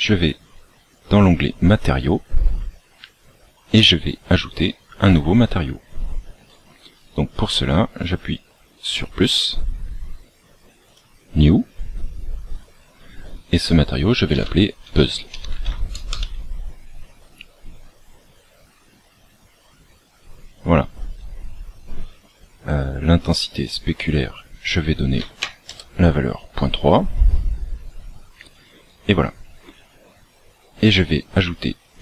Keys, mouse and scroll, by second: 4.1-5.4 scroll down 10, 5.5 scroll up 2, 6.1-7.1 scroll up 12, 8.8 click, 22.9-24.0 scroll down 3, 24.0 click, 27.9-28.3 scroll down 3, 28.3-29.0 scroll up 5, 30.0 scroll up 3.